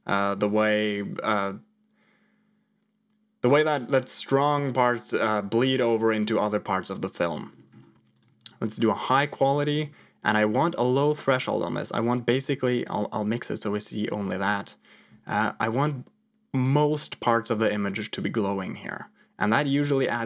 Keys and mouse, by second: 8.2 click, 9.5 middle click, 10.8-12.2 shift+drag, 12.9 click, 15.2-20.2 shift+drag.